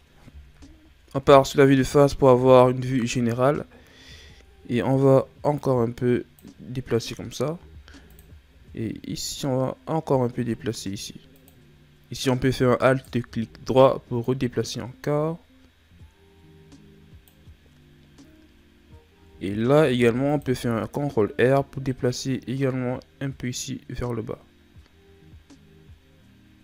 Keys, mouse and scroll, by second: 0.5 KP_1, 1.2 Tab, 2.3 shift+scroll up 1, 2.9-3.5 ctrl+scroll up 1, 3.5-4.0 scroll up 1, 4.1 Tab, 5.6 click, 7.5 ctrl+r, 12.8 alt+right click, 14.2 click, 19.7 ctrl+r.